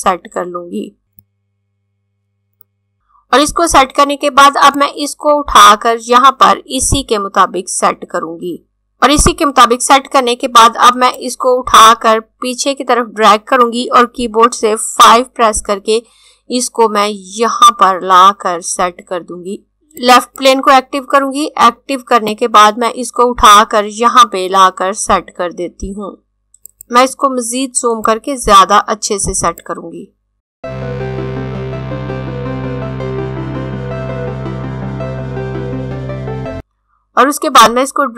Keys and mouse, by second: 4.7 click, 11.1 click, 14.9-16.9 typing, 20.1 click, 26.7 click, 33.9 click, 36.0 click.